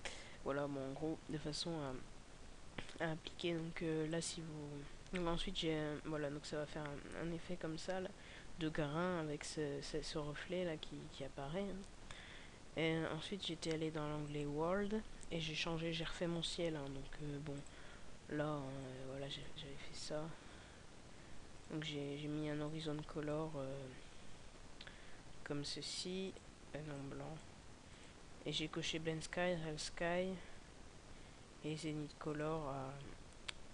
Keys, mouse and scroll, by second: 1.5 scroll up 2, 2.4-4.1 scroll up 5, 4.1 click.